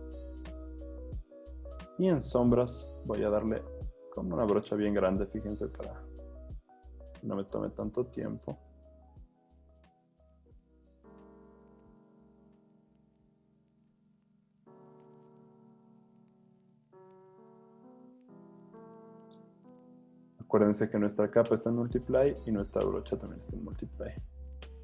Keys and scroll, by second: 3.0 b, 11.3 super+d, 14.4 super+z, 16.5 super+z, 23.9 z.